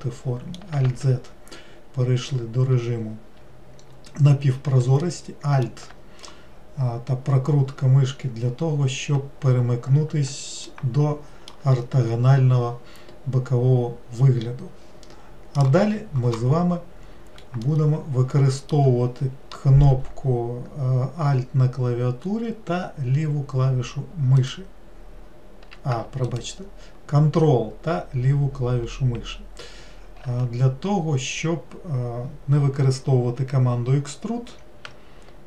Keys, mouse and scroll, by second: 0.0 middle click, 0.9 alt+z, 5.0 alt+middle click, 8.3-8.6 scroll down 2, 10.7-13.8 shift+middle drag, 17.7-20.9 shift+middle drag, 24.4 alt+right click, 26.3 ctrl+right click.